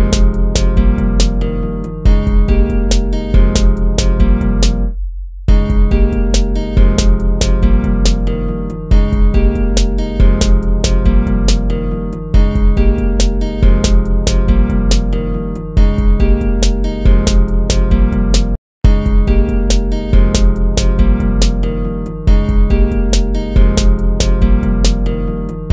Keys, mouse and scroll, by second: 2.1 ctrl+-, 4.5 ctrl+-.